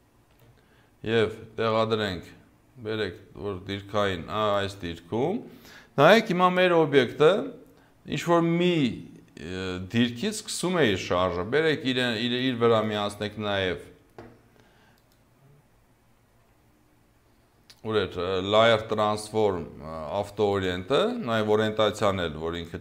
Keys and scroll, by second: 6.6 0, 10.3 0.